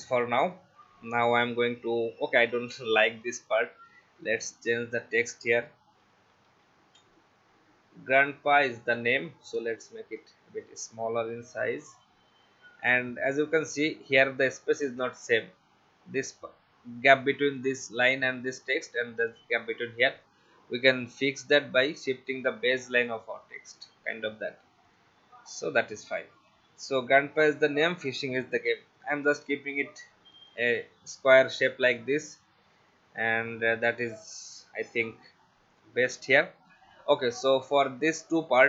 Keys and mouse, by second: 3.1 Delete, 3.9 t, 4.6 click, 5.6-7.2 typing, 8.7 click, 24.9 click, 26.3 click, 27.4 click, 30.5 click, 34.1 click.